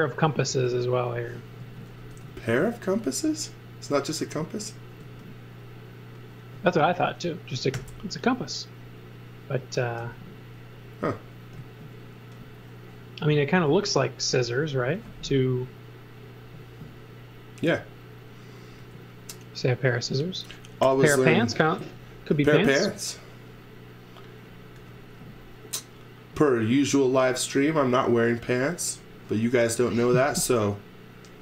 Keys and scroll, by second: 0.5 space, 1.6 z, 2.1 space, 5.0 z, 7.8 i, 10.0 b, 11.6 z, 12.4 x, 14.4 x, 18.8 space, 20.8 g, 21.8 z, 24.8 x, 25.2 v, 26.2 v.